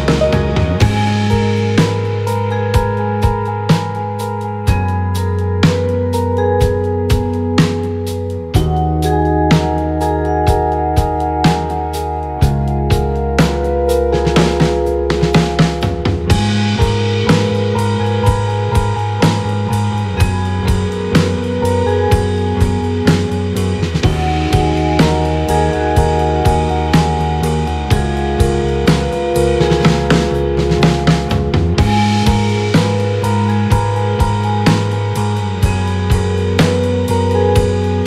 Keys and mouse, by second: 3.2 shift+click, 9.4 shift+click, 14.2 click, 26.1 click, 27.0 shift+middle click, 32.1 click, 36.5 shift+click.